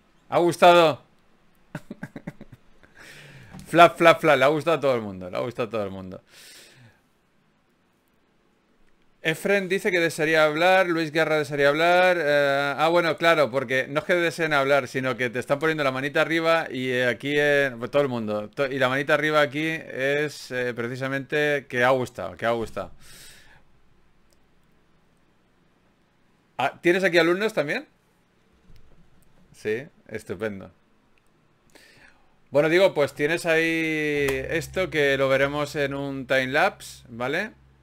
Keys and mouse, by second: 1.0 middle click, 25.0-37.8 middle drag.